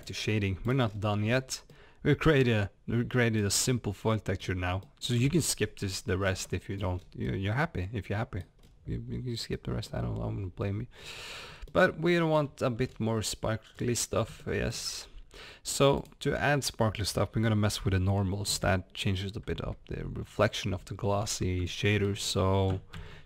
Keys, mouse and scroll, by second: 0.0 click, 0.9 scroll up 1, 1.8-23.2 middle drag, 3.5 scroll up 1, 4.4 scroll down 1, 6.2 scroll up 1, 6.8 scroll down 1, 7.0 scroll up 1, 8.6 scroll down 1, 9.1-9.5 scroll up 1.